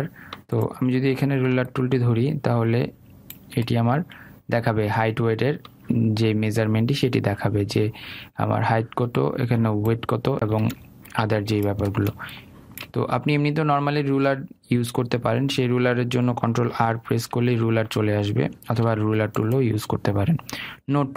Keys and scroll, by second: 17.5 ctrl+r.